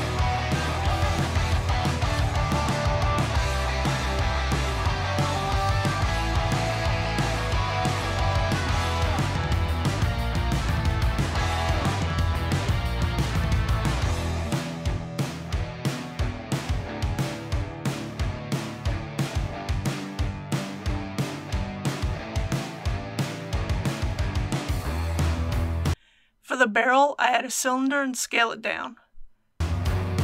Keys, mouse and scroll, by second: 0.5 2, 0.8 click, 1.2 ctrl+b, 2.1 click, 2.2 middle click, 2.2 scroll up 1, 2.8 Tab, 3.7 click, 3.9 middle click, 5.0 click, 5.4 Tab, 5.8 middle click, 6.0 KP_1, 6.5 click, 7.0 ctrl+r, 7.5 click, 8.4 middle click, 8.7 click, 9.0-12.1 typing, 9.1 click, 9.8 click, 10.7 click, 11.6 click, 12.7 click, 13.2 typing, 14.1 click, 14.5 ctrl+r, 14.6 click, 15.2 typing, 15.9 click, 17.5 typing, 18.1 click, 19.2 middle click, 20.2 typing, 25.3 click, 25.9 alt+a, 26.9 shift+a.